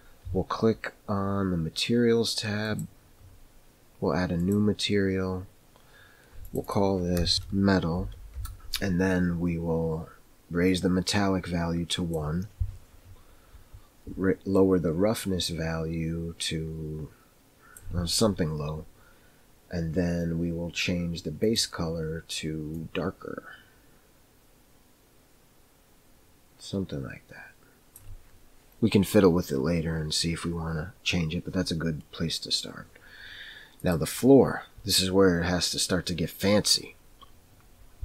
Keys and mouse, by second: 2.8 click, 7.3 click, 7.3 e, 7.3 BackSpace, 10.7 click, 14.6 click, 21.4 click.